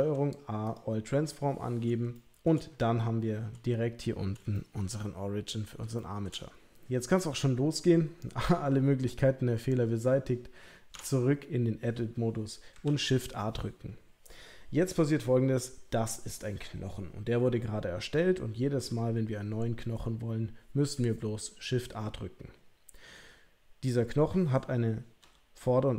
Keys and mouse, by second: 2.1-2.4 shift+middle drag, 4.5-4.9 shift+middle drag, 5.9-6.3 shift+middle drag, 10.9 Tab, 12.8 shift+a, 25.2 g.